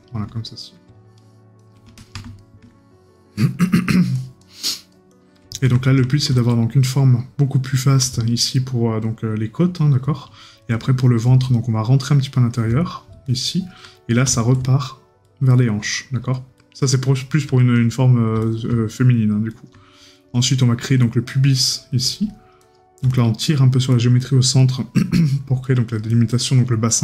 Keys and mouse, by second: 2.4 right click, 5.7 right click, 13.9 right click, 17.6 right click, 20.1 right click, 24.6 right click.